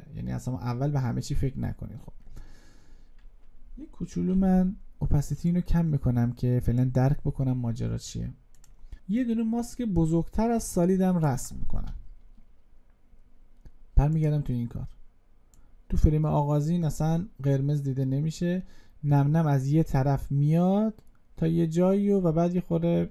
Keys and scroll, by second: 8.9 ctrl+z.